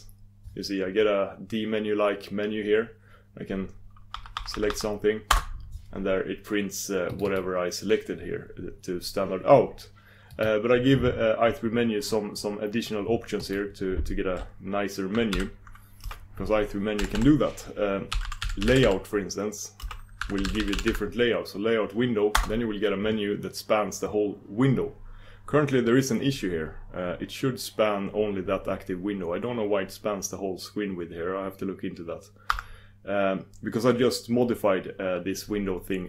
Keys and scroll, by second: 13.8 super+d, 32.5 super+d.